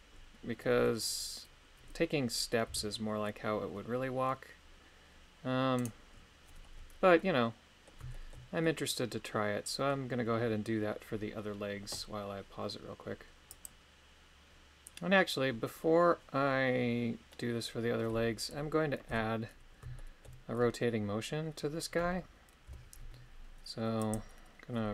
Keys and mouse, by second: 2.6 r, 7.2 middle click, 8.1 shift+middle click, 8.6-9.9 middle drag, 17.3 middle click, 19.1 KP_3, 20.0 shift+middle click, 22.7 i.